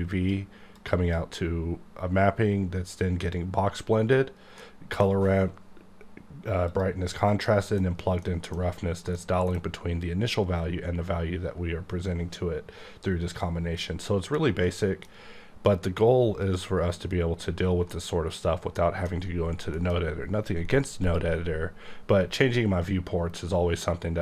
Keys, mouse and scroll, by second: 0.7 click, 4.6 middle click, 6.7 click, 7.4 middle click, 8.2 middle click, 9.1 middle click, 9.5 scroll down 1, 13.8 scroll down 2, 14.1 middle click, 14.7 middle click, 16.4 click, 17.0-17.3 scroll up 2, 17.3-17.8 scroll down 1, 17.8 middle click, 19.7 alt+m, 21.0 click, 22.5-23.8 scroll up 2, 23.8-24.2 scroll up 1.